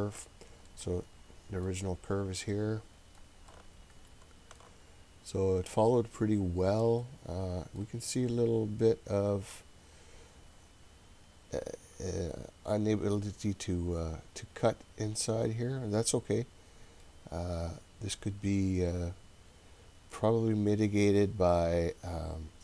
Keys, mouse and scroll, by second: 0.7 middle click, 2.5 middle click, 3.5-4.6 shift+middle drag, 5.2-6.6 scroll up 3, 7.0 middle click, 7.8-8.5 scroll up 1, 8.5-9.4 scroll down 1, 15.0-16.0 scroll down 4, 17.0-22.6 middle drag.